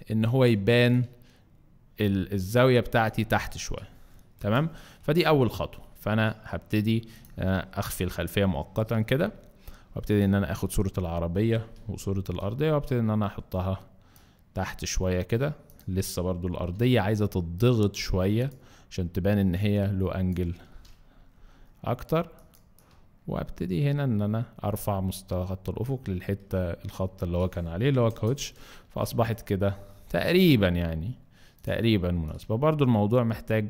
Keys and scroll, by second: 4.4 Return, 11.8 v, 12.4 shift+v, 15.0 ctrl+shift+v, 15.9 ctrl+shift+v, 16.6 ctrl+shift+t, 17.1 ctrl+shift+t, 28.1 Return, 28.9 alt+Return.